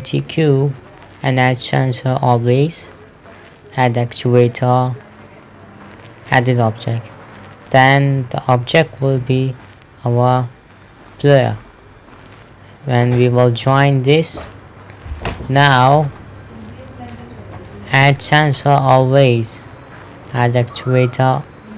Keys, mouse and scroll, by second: 1.8 click, 6.8 click, 9.6 click, 15.9 right click, 18.0 click.